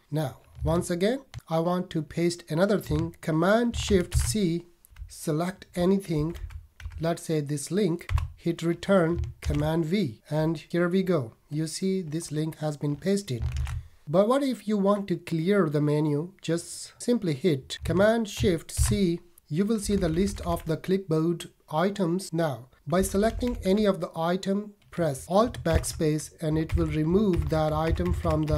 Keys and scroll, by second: 4.1 shift+super+c, 5.0 Down, 9.4 super+v, 13.5 shift+super+c, 18.7 shift+super+c, 19.8 Down, 23.0 Down, 25.7 alt+BackSpace.